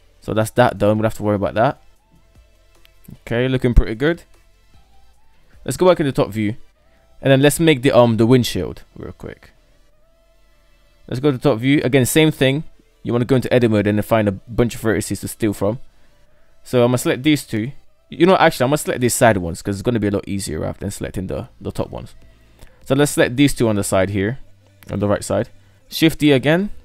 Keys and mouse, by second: 0.7-1.0 shift+middle drag, 1.6-3.2 middle drag, 3.9 shift+middle click, 4.5 KP_7, 6.0 shift+middle drag, 7.6 shift+middle drag, 8.4 middle click, 8.8-9.8 middle drag, 10.2 KP_7, 11.4 shift+middle click, 12.2 Tab, 15.2 right drag, 16.0 shift+right click, 20.3-21.6 right drag, 22.2 shift+right click, 24.8 shift+d.